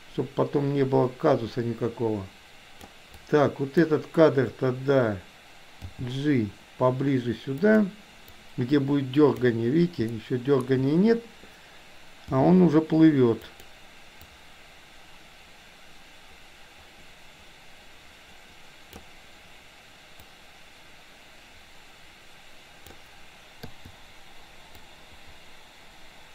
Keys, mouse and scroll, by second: 3.3 click, 5.8 g, 8.4-9.6 drag, 10.1 shift+middle click, 12.4 g, 14.3-19.0 drag, 20.4-23.0 drag, 24.9-26.3 drag.